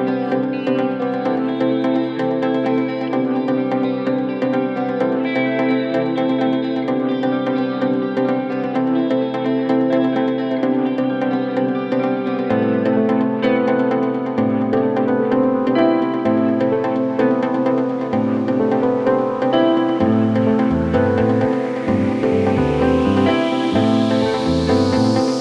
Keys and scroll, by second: 1.6 Escape, 10.4 F9, 21.2 F9, 23.5 Escape.